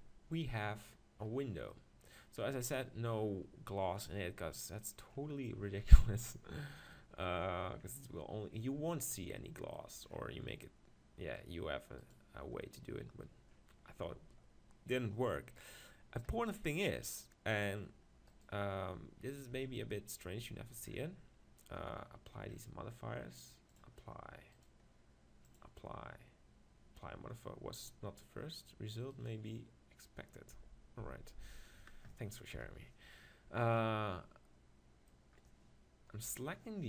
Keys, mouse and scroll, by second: 12.0-13.9 right drag, 18.3-19.6 right drag, 19.6 Tab, 20.4 Tab, 23.8-26.4 drag, 24.6-27.3 right drag, 29.1-30.9 right drag, 30.6 Tab, 31.0 Tab, 31.6-33.3 right drag, 32.5 KP_7, 33.8 middle click, 36.2 KP_7.